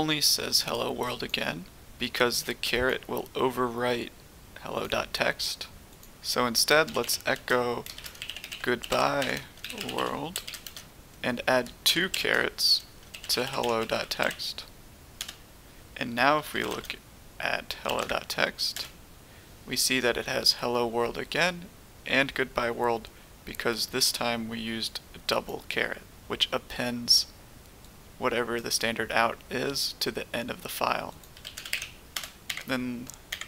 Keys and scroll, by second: 6.4-14.6 typing, 15.2 Return, 16.1-17.8 typing, 18.0 Tab, 18.7 Return, 31.3-32.2 typing, 33.3 Up.